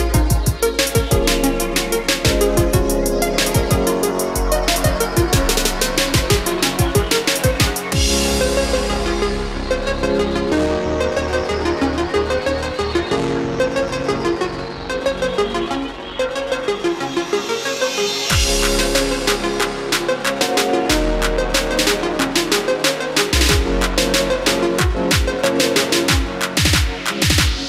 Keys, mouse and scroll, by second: 1.5 click, 6.3-6.9 scroll up 1, 6.9-7.4 scroll down 1, 7.4-7.9 scroll up 1, 8.4-11.5 drag, 12.2-13.0 scroll up 1, 13.4-27.6 drag.